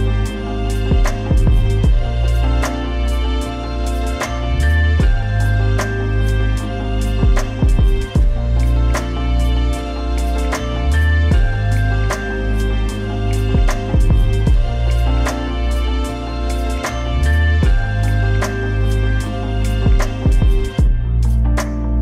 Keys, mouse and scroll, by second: 0.3 scroll up 1, 0.9 typing, 1.2 scroll down 1, 2.6 click, 3.1-3.8 typing, 5.6 click, 8.9 middle click, 10.5 click, 14.8 scroll up 1, 16.2-18.5 drag, 18.5 scroll up 1, 20.7-22.0 drag.